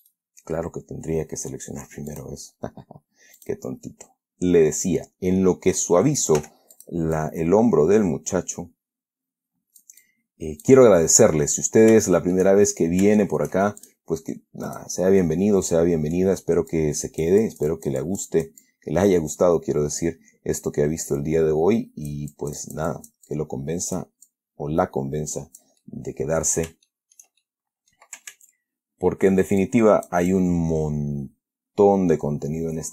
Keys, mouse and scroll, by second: 0.4 right click, 2.4 click, 3.7 click, 6.7 f, 7.1 click, 7.5-10.3 drag, 11.3-11.6 scroll down 1, 11.6-12.9 middle drag, 12.9 shift+scroll up 1, 14.1 shift+click, 15.0 click, 15.5-16.7 middle drag, 17.0-22.6 drag, 24.6-26.1 drag, 26.1-27.1 middle drag, 27.2-27.7 shift+middle drag, 27.7-28.4 shift+middle drag, 28.6 ctrl+z, 29.9 ctrl+click, 32.1-32.9 drag.